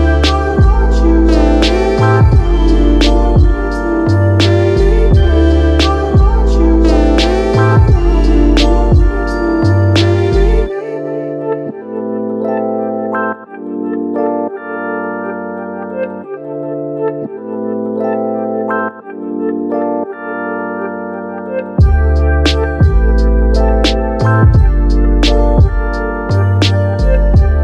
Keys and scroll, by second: 1.1-2.5 typing, 1.1 Return, 15.7-16.5 typing, 21.0 ctrl+2, 26.9-27.6 typing.